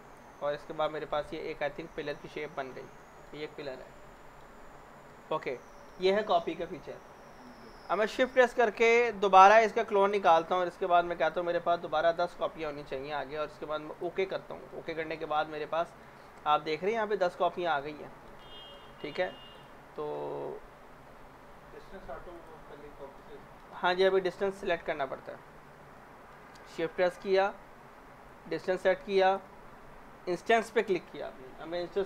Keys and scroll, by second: 11.8-12.8 typing, 15.1-18.2 typing, 24.1 ctrl+z, 24.7 ctrl+z, 25.2 ctrl+z.